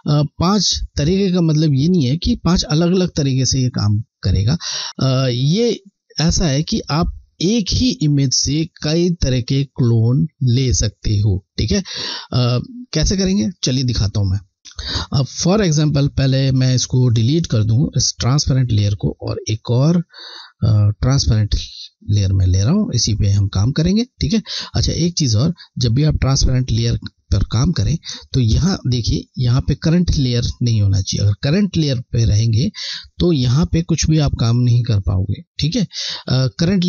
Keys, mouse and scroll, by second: 14.5 scroll, 14.7 scroll, 15.3 alt+scroll down 1, 17.5 click, 23.2 scroll, 24.3 scroll, 25.8 click, 25.9 click, 28.7 click, 31.5 click.